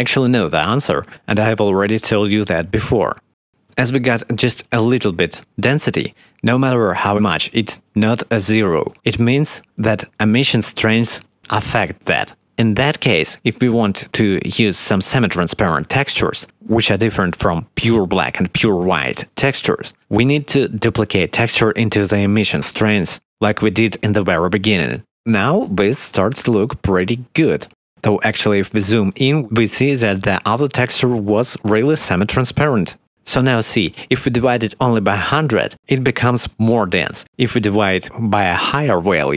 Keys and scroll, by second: 19.9 shift+d, 25.5 0, 35.7 1, 35.8 0, 35.9 Return, 39.3 1.